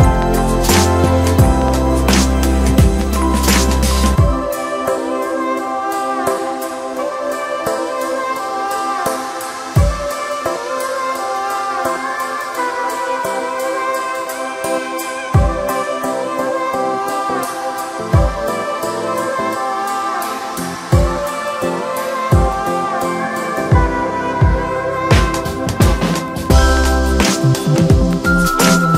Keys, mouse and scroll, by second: 0.0 scroll up 1, 1.9 click, 2.8-3.1 scroll up 2, 3.1 Tab, 3.5-4.0 scroll up 1, 4.0 2, 4.6 click, 4.7 click, 5.6 shift+drag, 6.3-8.2 right drag, 8.2-8.5 scroll down 2, 8.5 Tab, 9.0-10.8 middle drag, 10.8 KP_1, 11.9 ctrl+1, 13.1 shift+middle click, 13.5 scroll up 2, 13.8 Tab, 14.3-15.9 shift+middle drag, 15.9 click, 16.3-17.2 scroll up 1, 17.2 3, 18.5 click, 19.1 shift+click, 19.8 shift+click, 20.1-21.6 scroll down 1, 21.6-24.7 drag, 27.8 s.